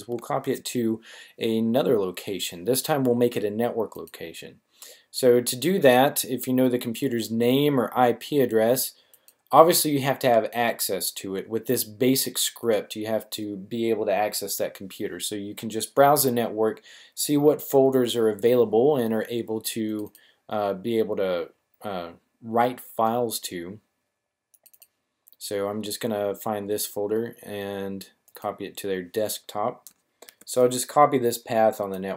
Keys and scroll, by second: 30.2 super+c.